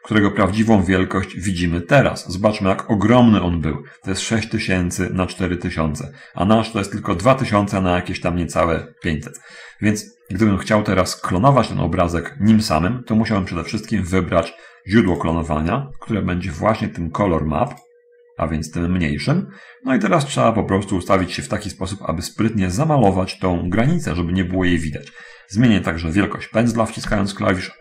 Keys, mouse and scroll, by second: 1.1 middle click, 11.8-12.4 scroll up 2, 12.5-14.0 middle drag, 14.0-14.3 scroll down 1, 15.4 click, 18.0 click, 18.8-21.5 right drag, 22.0-22.7 scroll up 1, 22.7 scroll up 1, 24.4 middle click, 27.3 f.